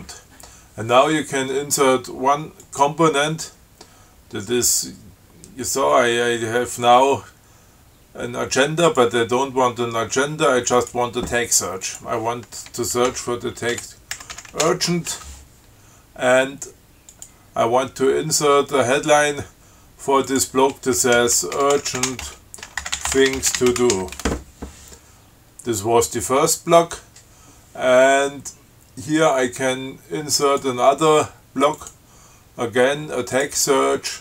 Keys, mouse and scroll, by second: 2.8 click, 9.1 click, 11.0 click, 12.1 click, 13.3-15.4 typing, 17.3 click, 20.5 click, 21.2-24.7 typing, 25.8 scroll down 2, 30.7 click, 32.0 click, 33.6 click.